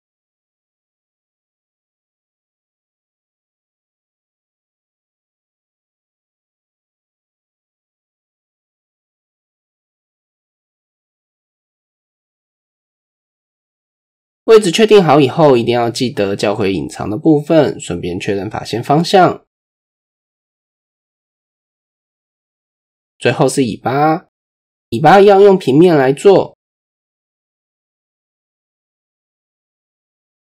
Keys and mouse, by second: 1.5-2.3 drag, 2.9 KP_1, 4.4 click, 5.2 s, 6.8 shift+middle drag, 7.2-7.8 middle drag, 8.6 middle click, 9.7 click, 10.2 middle click, 10.7 Tab, 11.1-11.4 middle drag, 12.0 middle click, 12.9 KP_1, 13.9 click, 14.5 click, 15.7 Tab, 16.0 a, 17.6 alt+h, 17.6-19.0 typing, 19.6 Tab, 20.0 click, 20.4 Tab, 20.9 a, 21.7 shift+n, 22.3 Tab, 22.8 shift+click, 25.3 click, 25.9 shift+click, 28.5 shift+a.